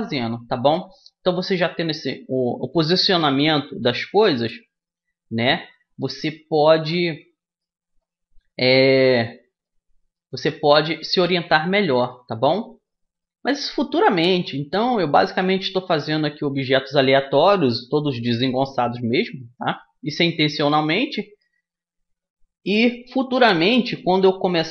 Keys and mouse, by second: 7.7-10.4 middle drag, 10.4-11.7 drag, 11.7-17.5 middle drag, 17.5-20.1 right drag, 20.1 middle click, 20.3-22.2 right drag, 22.2 middle click, 22.5 middle click, 22.6-24.5 right drag, 23.3-24.7 middle drag.